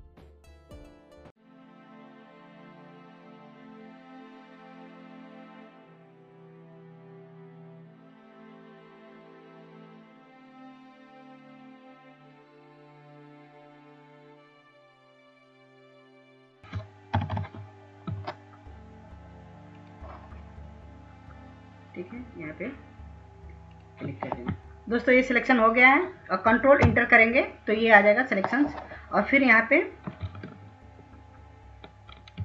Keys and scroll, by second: 4.2 ctrl+alt+z, 4.2 ctrl+alt+z, 5.4 ctrl+z, 6.5 ctrl+z, 6.5 ctrl+z, 8.0-8.5 scroll, 8.8-9.2 scroll, 9.4 scroll, 13.2 ctrl+z, 13.8 ctrl+z, 13.9 ctrl+space, 15.2 ctrl+-, 15.5 ctrl+-, 16.0 ctrl+-, 16.2 ctrl+z, 16.9 ctrl+alt+z, 18.5 ctrl+-, 19.5 ctrl+-, 24.1 ctrl+alt+z, 25.6 ctrl+alt+z, 28.9 ctrl+Return.